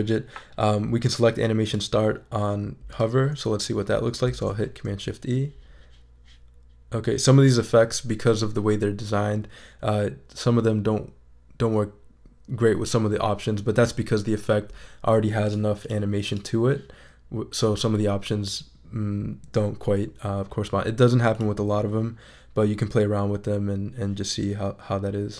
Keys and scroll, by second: 4.2 shift+super+e.